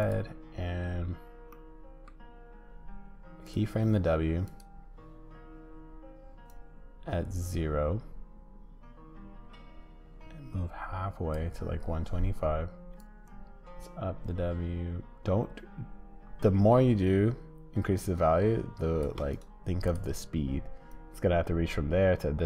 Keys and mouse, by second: 1.6 click, 6.5-12.9 drag, 13.1-19.1 shift+drag, 20.9-22.4 drag.